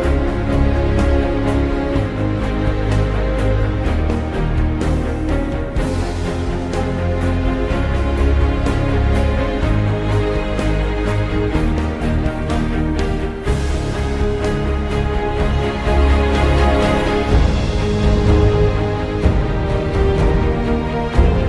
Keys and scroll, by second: 10.8 shift+3, 12.9 Return.